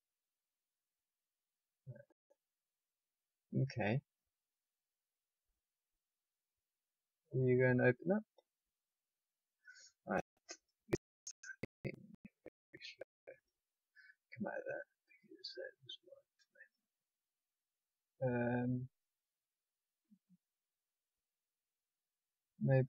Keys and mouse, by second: 1.0-2.6 drag, 6.2-7.6 drag, 12.0-13.4 drag.